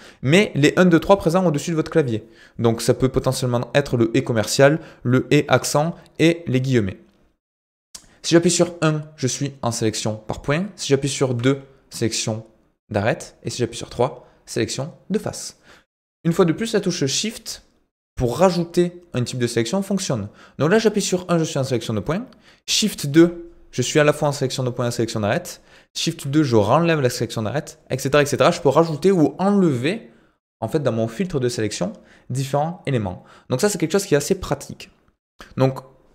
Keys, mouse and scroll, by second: 21.8 e.